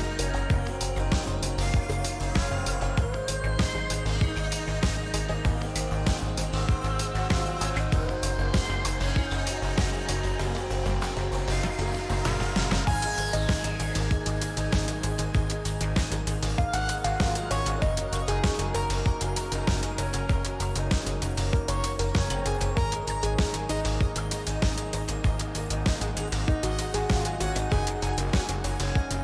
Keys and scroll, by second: 3.9 F1, 8.4 F2, 9.4 s, 9.4 i, 28.1 F1.